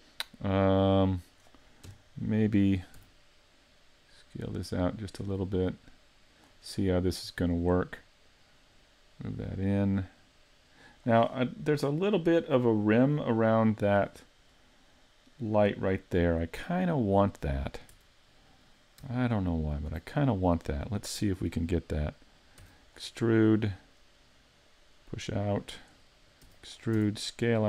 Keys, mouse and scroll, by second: 0.7 middle click, 1.9 KP_1, 3.0 s, 6.5 click, 6.8 middle click, 8.3 click, 11.8-12.4 scroll up 3, 12.4 middle click, 14.5-15.1 scroll up 1, 15.1 scroll up 1, 16.3 middle click, 18.0 Tab, 19.8 alt+right click, 22.6 e, 22.9 click, 23.3 middle click, 24.7 click, 26.5 e, 26.7 click, 27.0 s.